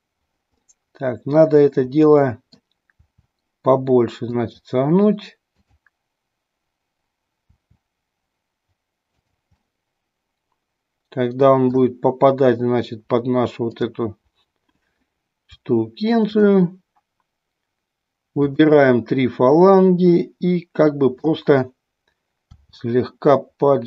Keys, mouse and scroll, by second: 0.6 middle click, 2.1 middle click, 2.9 r, 5.5-6.9 drag, 7.5 r, 9.1 click, 9.6-11.8 middle drag, 13.6-15.0 drag, 18.4-19.9 drag, 19.9-21.2 middle drag, 22.5 r.